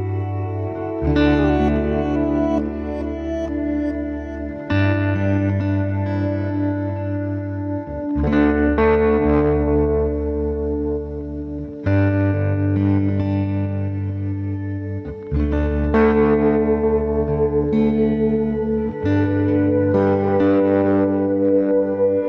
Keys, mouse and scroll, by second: 16.1-22.2 drag.